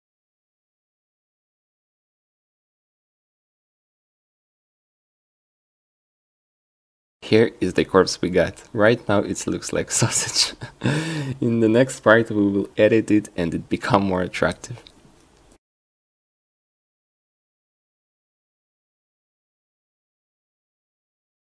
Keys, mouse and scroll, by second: 0.9 a, 1.1 c, 1.9 a, 2.1 c, 4.7-6.1 drag, 6.9 ctrl+z, 9.1 q, 13.8 q, 15.7 click, 16.6 ctrl+z, 16.9 shift+e, 19.2-20.5 drag.